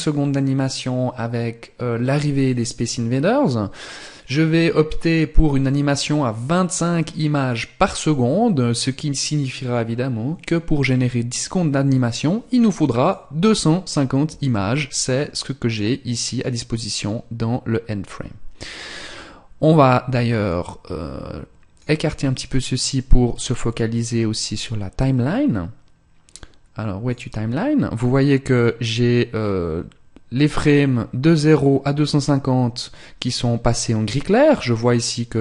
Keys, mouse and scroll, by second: 12.5 click, 19.9 click.